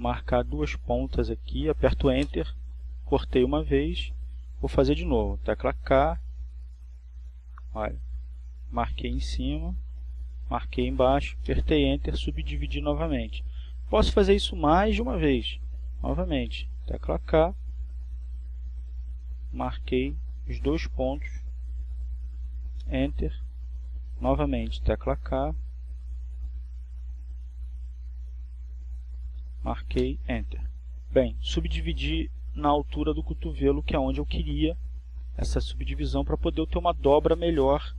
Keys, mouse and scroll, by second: 0.5 k, 1.4 click, 5.7 click, 6.7 Return, 9.9 k, 12.4 click, 14.7 click, 15.9 Return, 20.6 k, 22.8 click, 26.3 click, 27.2 Return, 29.2 k, 30.6 click, 33.4 click, 34.4 Return.